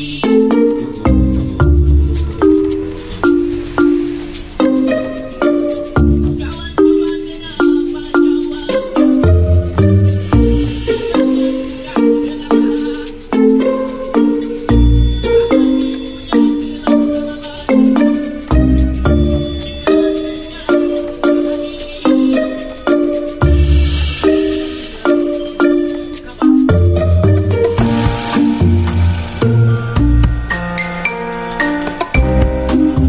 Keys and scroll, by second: 4.0 F9.